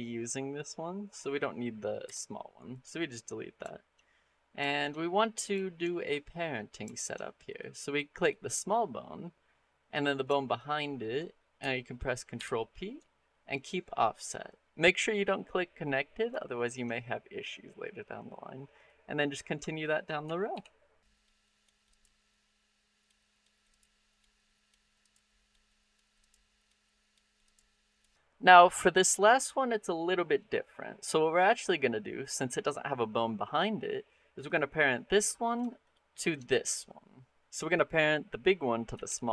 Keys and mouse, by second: 1.9 Delete, 3.5 shift+middle click, 3.9 middle click, 4.5 shift+click, 5.4 shift+click, 5.8 click, 6.8 shift+click, 6.9 middle click, 7.3 click, 8.0 click, 9.4 middle click, 10.3 shift+click, 12.2 ctrl+p, 16.2 shift+middle click, 18.0 middle click, 20.3 ctrl+p, 21.2 shift+click, 21.4 click, 21.9 ctrl+p, 23.0 shift+middle click, 23.2 click, 23.4 shift+click, 23.7 ctrl+p, 24.1 shift+click, 24.7 shift+click, 25.0 ctrl+p, 25.5 shift+click, 25.7 click, 26.2 ctrl+p, 26.6 shift+click, 27.1 shift+click, 27.5 ctrl+p, 27.9 shift+middle click, 29.1 middle click, 31.3 click, 38.9 ctrl+p.